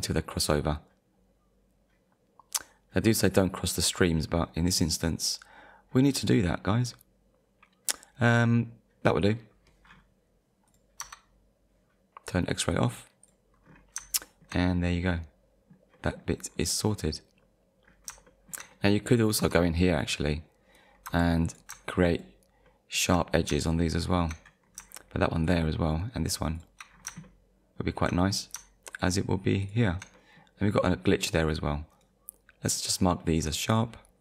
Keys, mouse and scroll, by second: 9.2 click, 9.9-10.3 scroll down 1, 10.7 click, 11.0 Tab, 12.7 click, 13.2 click, 13.6-14.0 scroll down 1, 14.2 shift+middle click, 14.7 middle click, 16.5-16.9 scroll up 1, 17.4-17.8 scroll up 1, 17.9-18.3 scroll down 2, 18.7 middle click, 19.2 click, 19.4 Tab, 20.0 click, 20.5-20.9 scroll up 1, 21.1 2, 21.5 click, 22.1 shift+click, 22.7 shift+middle click, 23.5 scroll down 2, 23.7 shift+middle click, 24.6-25.1 scroll up 2, 25.4 shift+click, 26.6 shift+click, 26.9-27.3 scroll down 2, 27.3 shift+middle click, 28.3-28.7 scroll up 2, 28.9 shift+click, 29.6 shift+click, 30.2 middle click, 31.9 right click, 33.7 click.